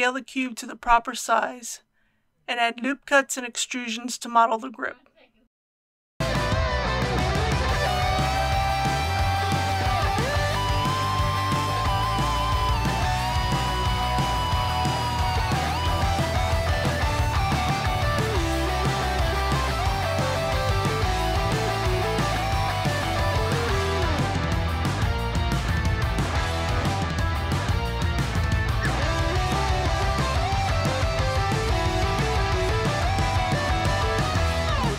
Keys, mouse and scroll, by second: 1.7 click, 2.8 shift+middle click, 5.1 middle click, 6.4 click, 6.6 typing, 8.1 click, 8.3 ctrl+r, 8.5 click, 9.3 middle click, 9.6 click, 9.8 typing, 10.5 click, 10.8 middle click, 11.2-12.2 typing, 11.4 click, 12.9 click, 13.2 ctrl+r, 13.2 click, 13.6-14.2 typing, 13.7 middle click, 13.8 click, 14.8 click, 15.3 ctrl+z, 15.8 ctrl+r, 16.0 click, 16.3 middle click, 16.6 click, 16.8-18.7 typing, 17.4 click, 17.8 click, 19.2 click, 20.0 g, 20.1 shift+y, 20.8 click, 21.2 click, 21.6-23.4 typing, 22.5 click, 23.9 click, 24.9 right click, 25.9 click, 26.7 e, 27.7 click, 27.9 e, 28.6 click, 28.8 g, 28.8 x, 29.5 click, 29.6 g, 30.1 click, 30.7-32.8 typing, 31.2 click, 31.8 click, 33.1 click, 34.3 click.